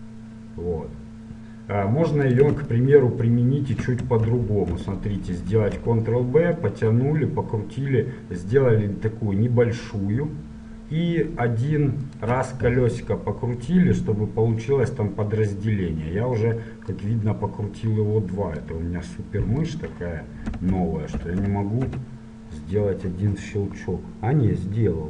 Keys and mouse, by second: 2.9-5.5 middle drag, 4.4 ctrl+z, 5.5 ctrl+b, 21.6 click, 22.0 click, 24.4-25.0 middle drag.